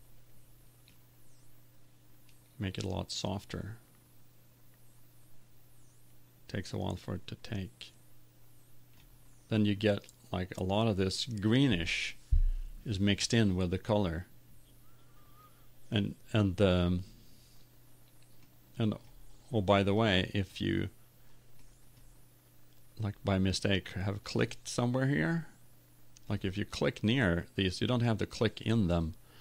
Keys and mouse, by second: 1.0-2.5 right drag, 2.5 click.